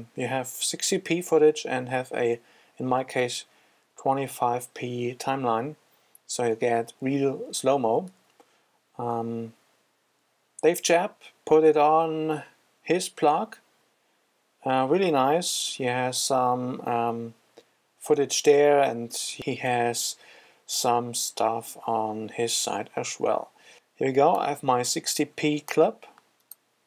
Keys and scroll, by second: 8.8 super+Tab.